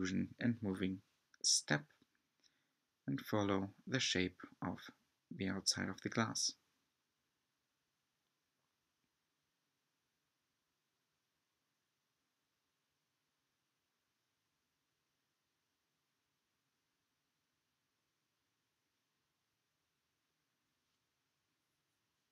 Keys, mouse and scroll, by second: 0.6 z, 0.7 z, 1.4 g, 2.5 e, 4.5 s, 6.3 shift+middle click, 6.7 e, 8.5 s, 10.2 e, 12.0 s, 14.3 e, 15.8 shift+middle click, 16.2 s, 19.1 e, 20.7 s.